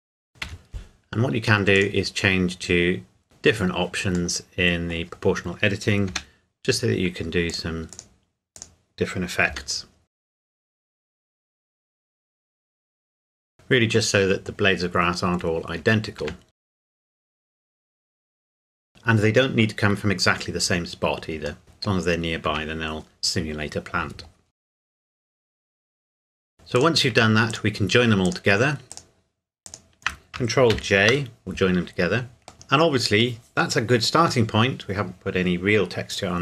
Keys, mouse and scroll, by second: 0.0 g, 0.1 scroll down 1, 0.2 scroll up 1, 0.4 Escape, 1.8 click, 4.4 middle click, 5.2-6.1 scroll up 1, 6.1 g, 7.5 click, 9.5-12.9 typing, 10.1 click, 10.6 click, 10.9 scroll up 1, 11.1 click, 11.6 click, 11.8 click, 11.9 Tab, 12.0 middle click, 12.1 Tab, 12.2 alt+click, 12.6 Tab, 13.0 click, 13.1 middle click, 13.4 scroll down 1, 13.5 middle click, 14.5-15.8 scroll down 1, 15.8 Tab, 16.5 click, 16.7 g, 16.9 click, 17.0 r, 17.1 click, 17.2 Tab, 17.5 middle click, 17.7 alt+click, 17.8 g, 17.9 scroll down 1, 18.3 click, 18.4 Tab, 18.5 middle click, 18.7 KP_7, 18.8 scroll up 1, 18.9 Tab, 21.6 middle click, 22.5 Tab, 24.7 scroll down 1, 24.8 click, 25.0 s, 25.1 click, 25.2 middle click, 25.2 r, 25.4 click, 25.6 g, 25.8 click, 26.0 middle click, 26.5 shift+click, 26.8 click, 27.5 shift+click, 30.7 ctrl+j, 32.5 KP_1.